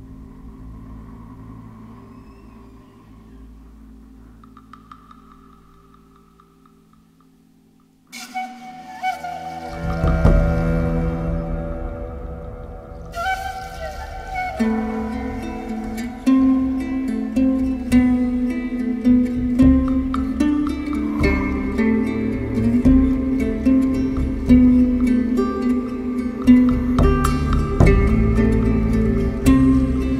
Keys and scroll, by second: 4.9 4, 5.7 4, 6.1 3, 8.5 ctrl+z, 10.7 ctrl+z, 15.2 7, 18.8 ctrl+z, 20.3 ctrl+z, 23.3 ctrl+z, 27.5 4, 28.3 3.